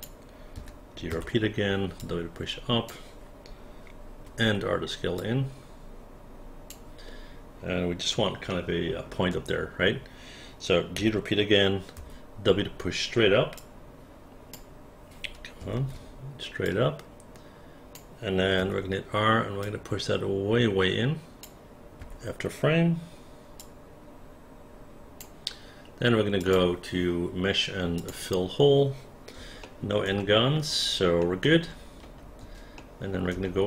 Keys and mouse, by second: 0.5 g, 1.1 w, 2.0 click, 4.3 r, 5.2-6.7 drag, 8.5 alt+middle click, 11.0 g, 12.0 w, 13.5-14.5 drag, 15.8 ctrl+z, 16.7-17.9 drag, 18.6 r, 19.6-21.4 drag, 22.0 f, 23.6-25.2 drag, 29.6 alt+middle click, 31.2 alt+middle click, 32.8 alt+middle click.